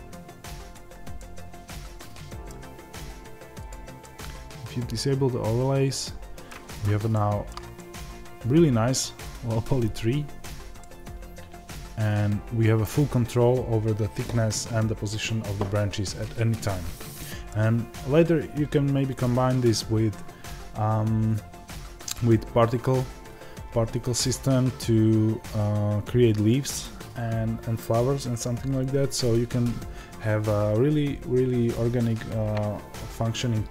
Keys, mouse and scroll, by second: 1.1-3.5 middle drag, 2.4-3.5 scroll down 2, 3.5 click, 3.9-33.7 middle drag, 6.7 scroll up 2.